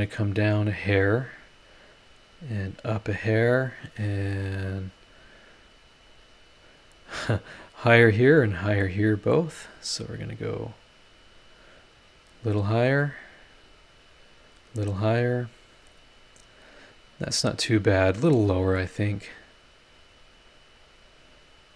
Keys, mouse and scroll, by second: 0.8 click, 1.7 middle click, 2.6 click, 4.4 click, 5.9-6.6 scroll up 3, 6.8-7.4 scroll down 4, 8.8-14.6 middle drag, 8.9 click, 10.5 click, 11.6 click, 14.0 click, 15.3 click, 17.1 scroll down 1, 17.7 scroll up 1, 18.3 middle click, 18.3 click, 18.3 right click, 19.9-21.1 drag, 21.6 click.